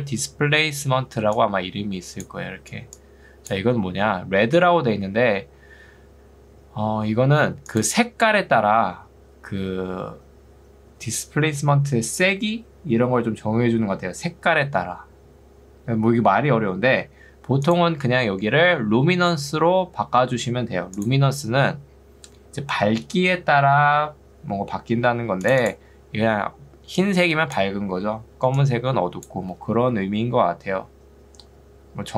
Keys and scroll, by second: 0.0 Escape, 2.6 ctrl+2, 3.8 Escape, 11.0 Escape, 26.2 ctrl+2, 30.0 Escape.